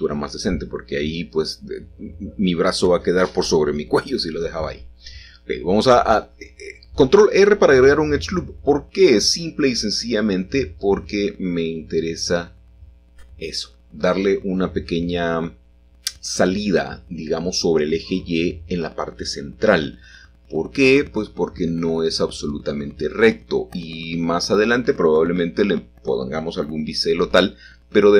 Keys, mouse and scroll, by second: 0.5-1.4 scroll up 1, 1.4-3.2 shift+middle drag, 3.2 ctrl+r, 3.7-5.1 drag, 6.9 s, 8.3 y, 9.3 Escape, 10.5 s, 10.8 y, 13.1 click, 14.9 i, 16.1 shift+d, 16.4 Escape, 16.7 g, 17.2 shift+z, 19.4 x, 25.8-27.0 shift+drag, 27.5-28.1 middle drag.